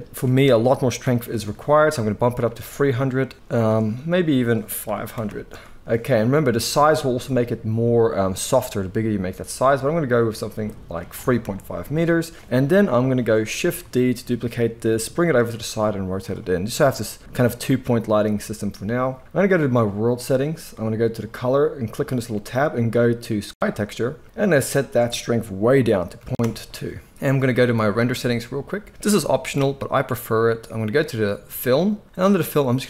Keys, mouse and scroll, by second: 1.4 0, 5.2 0, 12.8 KP_7, 13.8 shift+d, 15.3-15.6 middle drag, 15.5 r, 16.6-19.8 middle drag, 19.8 click, 20.0 middle click, 21.2-28.2 drag, 29.7-31.5 middle drag, 31.5-32.8 drag.